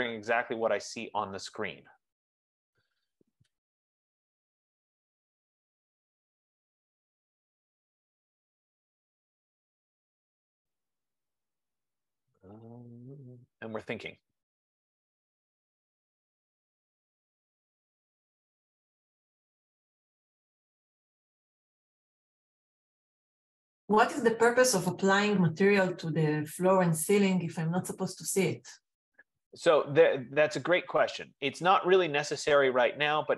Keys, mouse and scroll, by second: 18.7 F15.